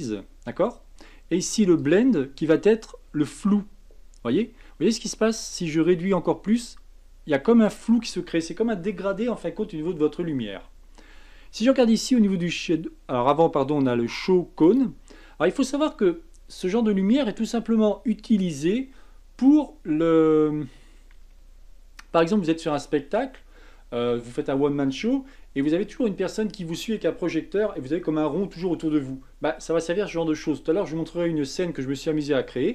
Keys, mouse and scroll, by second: 14.6 click, 15.6-18.7 scroll down 2.